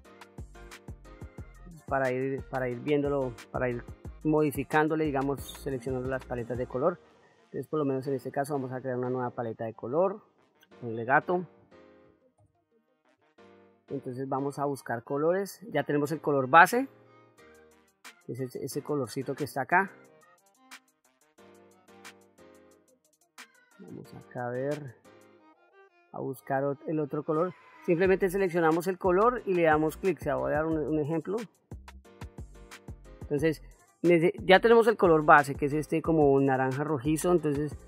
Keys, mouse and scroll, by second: 7.4 click, 8.6 click, 9.7-12.8 drag, 23.5-26.8 drag, 28.5-29.0 drag.